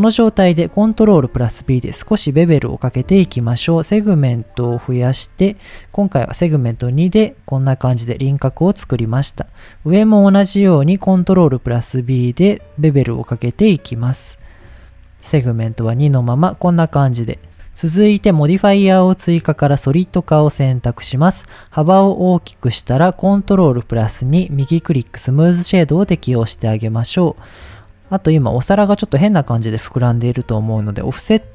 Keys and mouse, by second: 1.2 ctrl+b, 4.9 click, 6.4 shift+middle click, 8.5 shift+middle click, 9.6 alt+click, 11.2 ctrl+b, 14.0 click, 17.5 Tab, 20.3 click, 21.3-22.7 drag, 24.1 ctrl+2, 24.8 right click, 26.1 drag, 26.4 middle click, 27.2 middle click, 27.8-28.2 middle drag, 28.4 middle click, 29.2-29.6 middle drag, 30.2 shift+middle click.